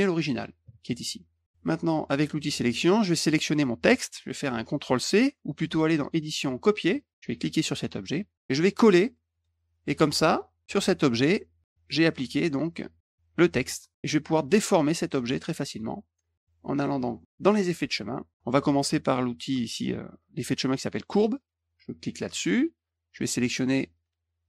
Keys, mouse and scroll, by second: 0.8 click, 2.4 click, 3.2 click, 6.0 click, 6.8 click, 7.5 click, 9.3 click, 11.6 click, 13.9-15.8 drag, 17.4 click, 22.3 click.